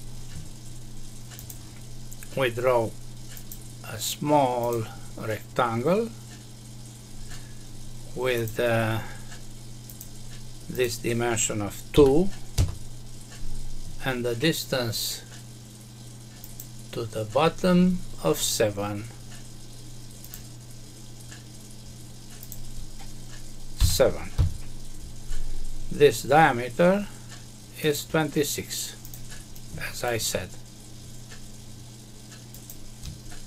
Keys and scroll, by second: 12.5 Return, 24.3 Return.